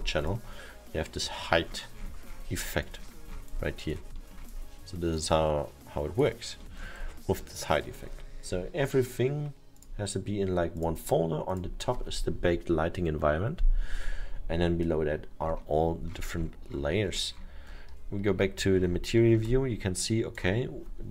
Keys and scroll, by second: 6.8 alt+7, 18.4 m.